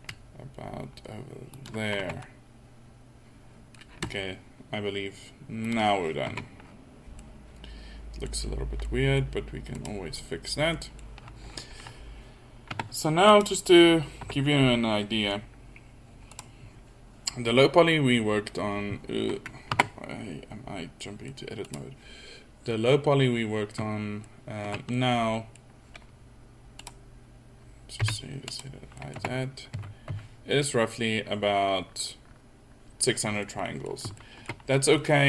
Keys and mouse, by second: 2.2 Tab, 6.4 Tab, 6.8 middle click, 12.9 Tab, 17.9 Tab, 20.6 Tab, 27.6 click, 28.0 h, 29.0 drag, 29.2 Tab, 29.8 a, 30.1 a, 34.7 middle click.